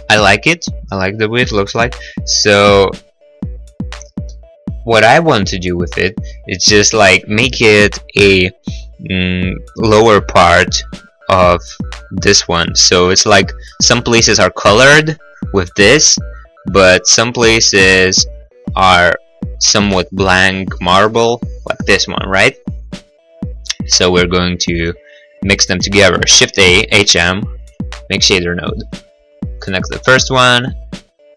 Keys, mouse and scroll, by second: 0.5 middle click, 1.1 middle click, 3.9 middle click, 4.0 middle click, 4.5 middle click, 4.7 middle click, 10.7-11.5 scroll, 11.5 click, 11.5 scroll, 11.7 click, 16.8 click, 16.9 click, 17.3 click, 17.4 click, 18.0 click, 18.1 click, 21.9 middle click, 22.3 middle click, 26.3 shift+a, 26.7 h, 26.9 m, 27.7 click, 28.6 click, 29.7 click.